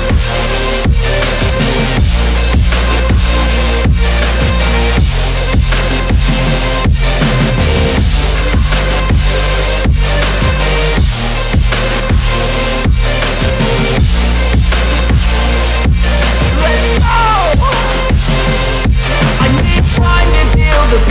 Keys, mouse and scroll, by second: 1.5 click, 3.2-6.5 typing, 5.5 click, 6.2 click, 6.6 click, 8.2-9.3 typing, 8.9 click, 9.5 click, 12.7 z, 12.9 click, 16.5 space, 16.7 click, 17.0 space, 17.2 click, 17.3 space, 17.4 click.